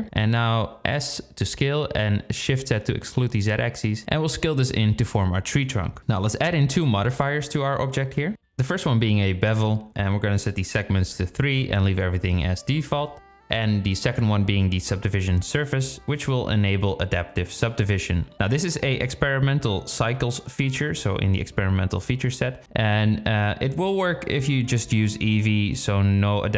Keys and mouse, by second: 5.4 Tab, 6.4 z, 10.0 click, 10.9-11.9 drag, 16.7 click, 21.6-22.8 drag, 23.3-24.7 drag.